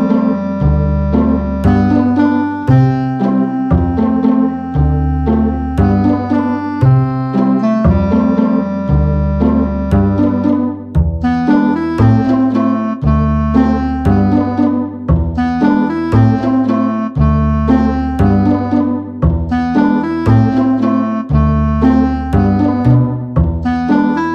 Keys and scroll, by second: 2.6 BackSpace, 2.8 9, 2.9 Return, 18.1 a.